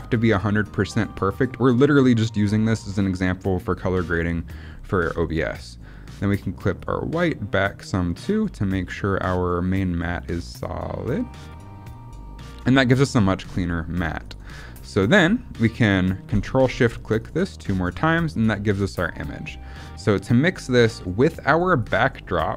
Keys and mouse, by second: 6.8 click, 9.4 click, 10.5 click, 11.8-14.3 drag, 14.5 middle click, 20.6-21.8 drag.